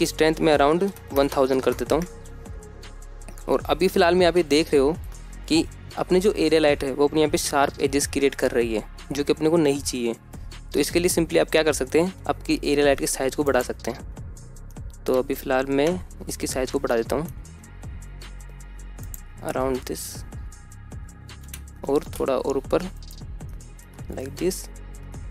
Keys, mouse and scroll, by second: 1.7-3.6 drag, 1.7 KP_0, 4.8 scroll up 1, 5.1-5.6 shift+middle drag, 5.8-6.6 scroll up 1, 6.6-7.8 scroll up 1, 10.2 scroll down 1, 10.7 scroll down 1, 10.8-11.2 shift+middle drag, 12.5 s, 13.9-15.2 drag, 15.2 middle click, 15.8-16.3 scroll down 1, 16.3-17.4 scroll down 3, 17.4-17.9 middle drag, 17.9 s, 19.5 click, 20.1 KP_0, 21.9 g, 22.5 z, 23.4 click, 24.0-24.6 shift+middle drag, 24.6-25.3 scroll up 3.